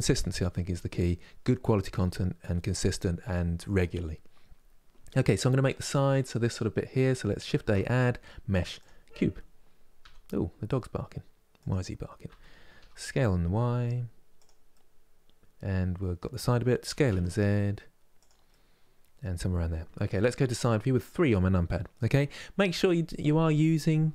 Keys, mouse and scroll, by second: 7.3 shift+a, 9.7 s, 12.0 s, 14.4-16.5 middle drag, 16.5 s, 18.2-20.0 middle drag, 20.0 KP_3, 23.8 KP_1.